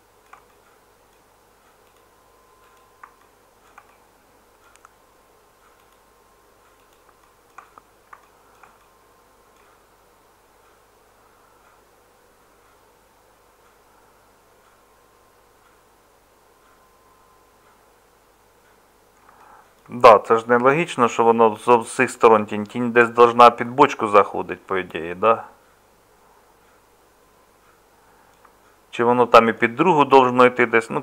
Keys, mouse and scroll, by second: 19.9-28.5 middle drag.